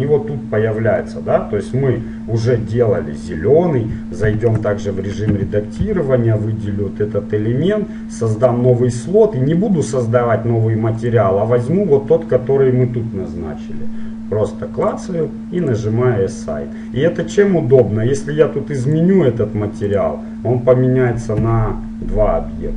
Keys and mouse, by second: 0.0-1.8 drag, 2.8-4.9 middle drag, 4.4 Tab, 5.5 a, 6.0 l, 8.6-10.5 drag, 11.1-13.2 drag, 15.8-17.8 drag, 19.1-20.9 drag, 21.6 Tab.